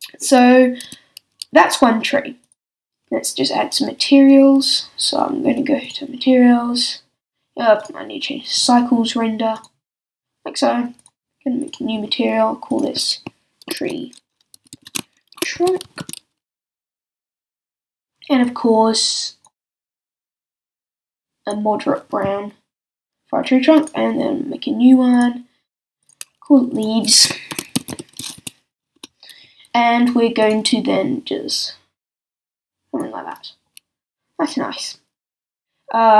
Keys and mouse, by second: 0.8 middle click, 0.8 a, 4.3-5.8 middle drag, 9.6-11.0 middle drag, 14.7 e, 23.8-25.1 drag, 25.7-30.0 drag, 30.0 middle click, 30.4-35.3 drag, 35.3 middle click.